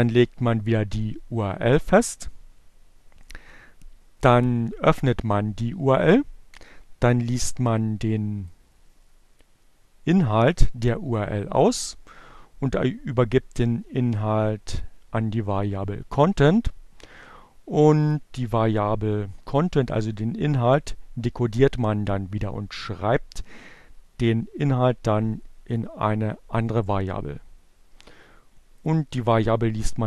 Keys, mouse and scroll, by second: 7.7 click, 12.8-14.0 drag, 16.3 click, 18.0-19.8 drag, 23.1-24.9 drag, 26.4-28.2 drag.